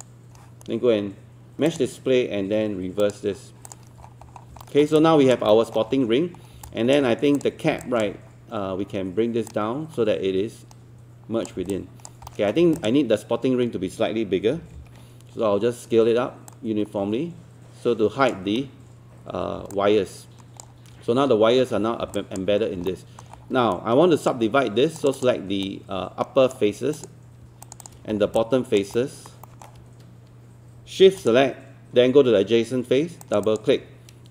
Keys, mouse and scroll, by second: 4.0-4.5 scroll down 1, 4.6 alt+middle click, 5.0 alt+click, 5.5 alt+middle click, 5.9-6.5 scroll up 1, 6.7 alt+click, 7.8-11.6 alt+drag, 11.7 alt+click, 12.3 alt+middle click, 12.8 click, 14.6 typing, 16.5-19.0 drag, 19.7 alt+click, 22.2 alt+click, 22.6 scroll up 1, 22.9 alt+middle click, 23.5 scroll up 1, 23.7 right click, 25.0 click, 25.7-27.0 right drag, 27.0 click, 27.7 shift+click, 28.2 scroll down 1, 28.4 alt+click, 29.0 alt+middle click, 29.5 alt+middle click, 31.2 shift+click, 33.3 shift+click, 33.5 shift+click.